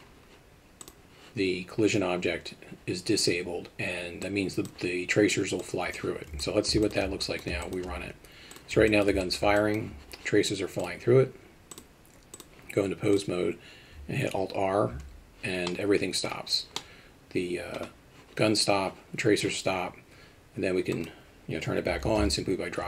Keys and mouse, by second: 4.2 click, 5.6 click, 6.4 alt+middle click, 6.8 shift+middle click, 7.2 alt+middle click, 7.6 alt+shift+middle drag, 8.5 click, 8.9 alt+middle drag, 9.2 shift+middle drag, 9.6 alt+middle click, 10.8 click, 11.7-12.4 drag, 13.1 click, 14.9 alt+r, 15.7-16.3 middle drag, 16.8-17.7 middle drag, 20.9-22.8 drag.